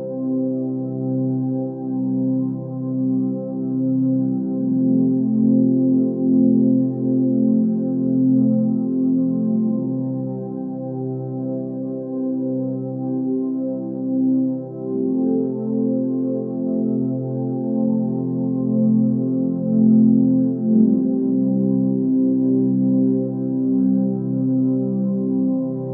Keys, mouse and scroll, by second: 2.3 ctrl+space, 3.2 click, 3.3 ctrl+space, 16.5 ctrl+space, 17.5 ctrl+space, 19.2 ctrl+t.